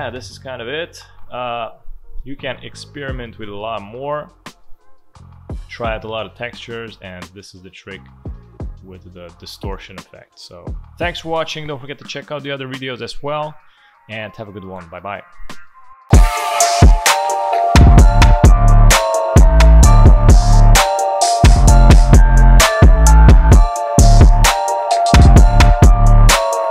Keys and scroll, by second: 3.0 space, 4.5 space.